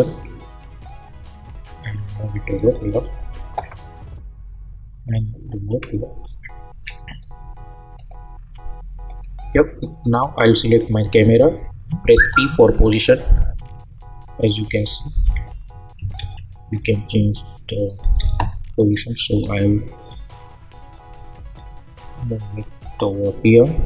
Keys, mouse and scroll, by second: 1.8-5.5 drag, 5.5-7.9 drag, 12.1 p, 13.0-16.2 drag, 16.2 ctrl+z, 16.8-18.2 drag, 18.2 ctrl+z, 18.8-20.7 scroll down 1, 20.7-23.8 drag.